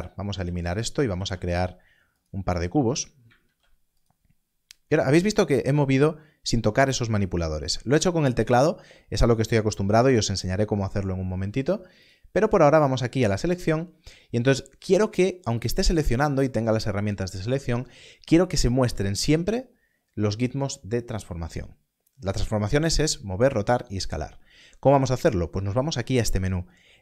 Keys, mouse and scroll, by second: 1.1 shift+a, 2.2 click, 2.6 click, 2.9 g, 3.4 shift+d, 4.0 click, 15.6 click.